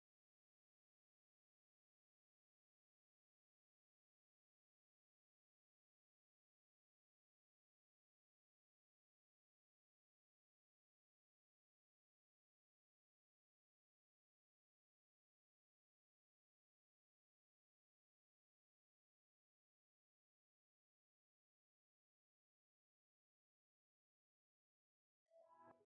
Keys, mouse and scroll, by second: 1.3 click, 1.5-3.2 right drag, 3.2 scroll up 1, 3.5 click, 6.8 click, 8.5 right click, 9.3 scroll down 1, 9.8-11.6 right drag, 11.6 scroll up 1, 12.2 right click, 13.3 scroll down 1, 13.5 scroll up 1, 13.7 click, 15.7 Return, 17.6 click, 19.8 scroll up 1, 22.0 click, 23.4-23.7 scroll down 1, 23.8 right click, 24.5-24.9 scroll down 1, 24.9 scroll up 1.